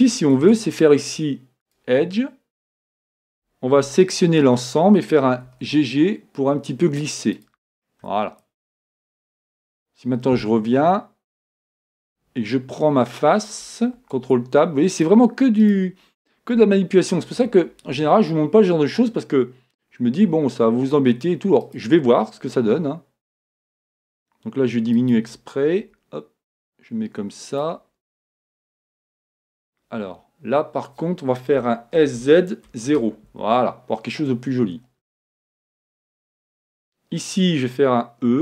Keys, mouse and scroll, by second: 3.3 a, 4.1-5.9 right drag, 5.5 g, 7.5-9.2 drag, 7.9-9.6 middle drag, 9.6 scroll up 1, 9.8 middle click, 11.5-12.1 scroll down 1, 12.1 scroll down 1, 12.2-14.0 middle drag, 15.7-17.4 right drag, 20.3 e, 22.7 s, 25.8 g, 32.0 s, 38.3 e.